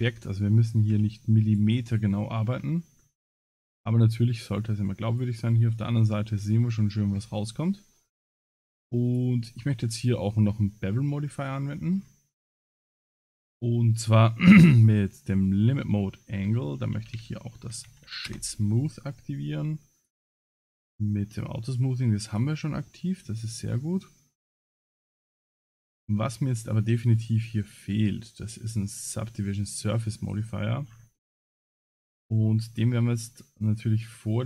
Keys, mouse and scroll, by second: 0.0 Tab, 0.5 middle click, 0.9 Tab, 1.4-1.9 drag, 1.9 middle click, 2.5 scroll down 5, 3.0 scroll up 2, 3.4 middle click, 5.7 middle click, 6.6 scroll up 1, 8.1 click, 9.9 middle click, 11.5-12.1 scroll down 12, 14.8 click, 15.5 middle click, 16.3 space, 18.0 Down, 20.0 click, 22.3 click, 22.9 middle click, 23.4 middle click, 24.9-25.4 scroll up 7, 26.7-27.2 scroll up 8, 27.7 scroll up 3, 27.7 click, 30.8-31.7 scroll down 25, 32.5 scroll down 3, 34.0 click.